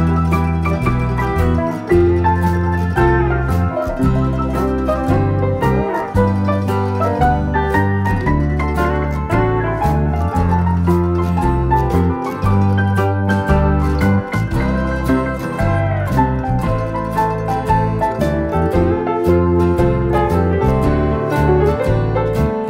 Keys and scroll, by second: 2.0 Page_Down, 2.6-4.3 typing, 5.8 F7, 6.7 F1, 7.4 F7, 8.2 F1, 8.7 ctrl+-, 8.9-9.4 typing, 13.7 F1, 16.5 ctrl+d, 18.4 Page_Down, 20.4 typing.